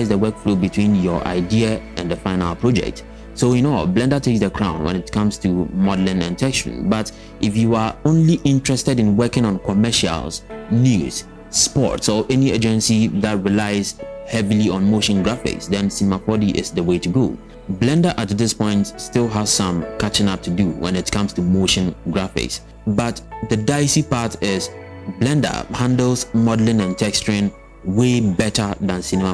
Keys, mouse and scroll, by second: 0.1 shift+click, 0.1 shift+click, 0.4-3.9 typing, 0.5 scroll down 3, 0.7 click, 0.7 scroll up 1, 2.7 scroll up 1, 4.1 Tab, 4.1 scroll down 2, 4.3 click, 4.3 scroll up 4.